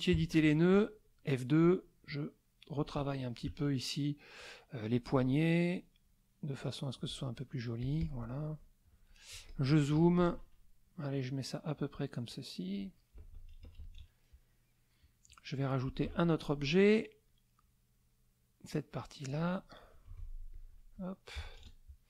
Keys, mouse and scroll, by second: 0.1 KP_Subtract, 0.3 KP_Add, 2.1 click, 3.5 ctrl+a, 4.4 click, 6.0-7.1 drag, 7.8 click, 8.9 click, 9.3 z, 9.5 click, 9.9 F2, 11.1 click, 12.3 click, 13.1 KP_Subtract, 14.4 middle click, 14.5 click, 16.0 F6, 17.6-19.5 drag, 20.1 F2, 20.5 click, 21.3 KP_Subtract, 21.6 KP_Add.